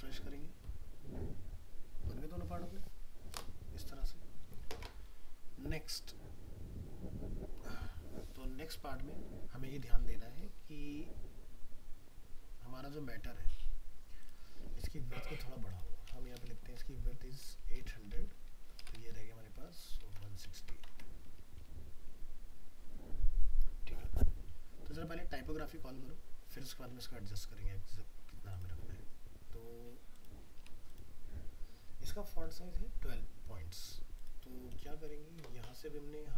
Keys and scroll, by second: 20.6 ctrl+s, 20.9 alt+Tab.